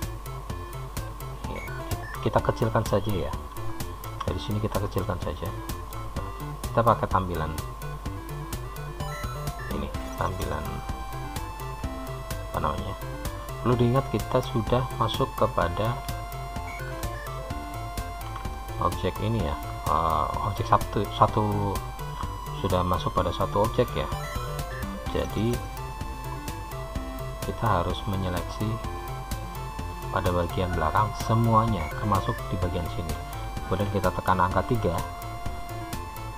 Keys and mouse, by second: 1.0-6.0 drag, 6.0 Tab, 21.5 click, 24.3 middle click, 25.4 shift+click, 26.8 shift+click, 28.3-30.2 shift+drag, 30.7-32.0 middle drag, 33.9 KP_3.